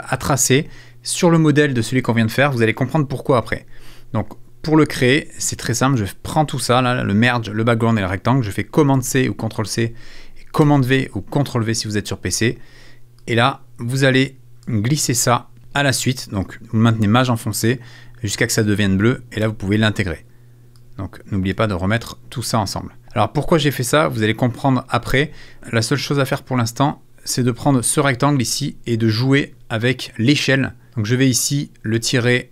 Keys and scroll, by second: 8.9 super+c, 10.6 super+v.